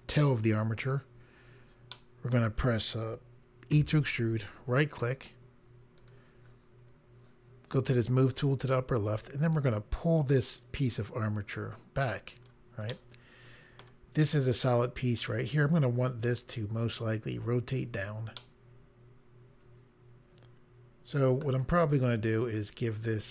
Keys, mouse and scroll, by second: 0.9-1.8 scroll down 1, 1.8 middle click, 3.7 e, 4.3 right click, 5.9 click, 9.5 click, 12.9 middle click, 18.3 middle click, 22.2 click.